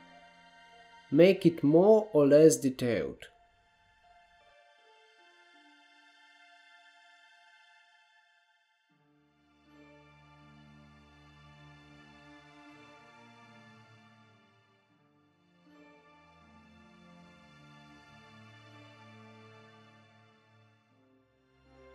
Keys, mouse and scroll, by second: 0.2 click, 0.5 middle click, 1.4 f, 1.5 f, 1.6 f, 1.7 f, 1.9 middle click, 2.6 click, 2.8 f, 3.0 f, 3.1 f, 3.2 f, 3.8-4.4 scroll down 1, 4.4-5.7 middle drag, 5.7 scroll down 1, 6.0 middle click, 6.7 ctrl+r, 8.7 KP_1, 9.0 KP_3, 9.6 KP_1, 10.2 KP_9, 10.6-11.0 scroll up 1, 11.0 shift+middle click, 11.2 alt+z, 11.5-13.0 scroll down 2, 13.6 click, 14.2 1, 14.9-15.3 scroll up 1, 15.3 click, 16.4 shift+click, 18.2 s, 19.6 click, 19.8-20.4 scroll down 1, 20.4 shift+middle click, 20.9 click.